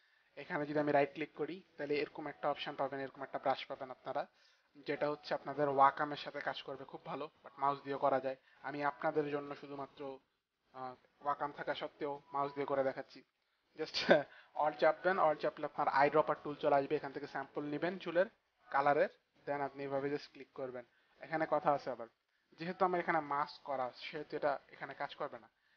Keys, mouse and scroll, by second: 0.8 right click, 4.9 click, 7.0 click, 17.2 alt+click, 19.1 click, 19.9 click.